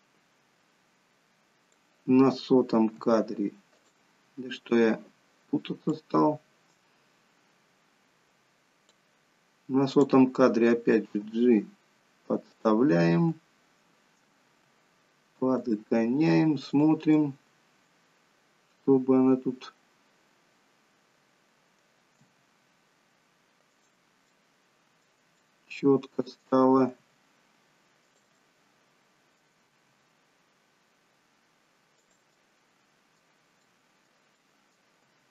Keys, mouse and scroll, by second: 3.0 g, 5.9 click, 9.9 click, 11.1 g, 12.9 middle click, 14.5 g, 16.7 click, 17.1 middle click, 22.1 g, 24.2 middle click, 25.3 middle click, 26.9 middle click, 26.9 g, 28.2 middle click, 29.7 g, 32.2 middle click, 33.5 middle click, 34.3 middle click, 34.5 middle click, 35.0 g.